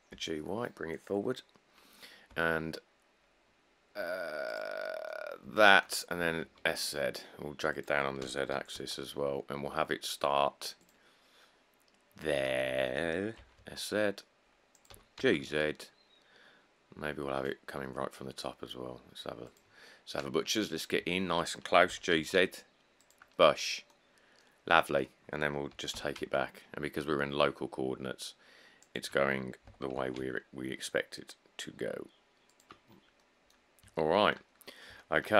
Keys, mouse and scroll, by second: 0.4 y, 2.5 s, 5.5 scroll, 6.4 s, 6.6 z, 8.5 g, 9.0 z, 13.6 s, 13.8 z, 15.1 g, 15.4 z, 15.6-19.6 shift+drag, 20.6 middle click, 20.6 middle click, 20.8 middle click, 21.0 middle click, 21.1 middle click, 22.1 g, 22.4 z, 26.0 g, 26.2 y, 29.9 g, 30.2 z, 33.1 middle click, 33.1 middle click, 33.2 middle click, 34.0 middle click, 34.1 middle click.